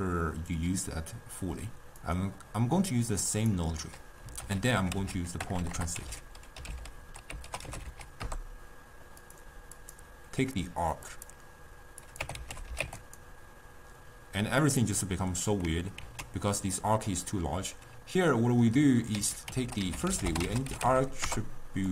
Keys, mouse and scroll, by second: 11.3-21.9 drag.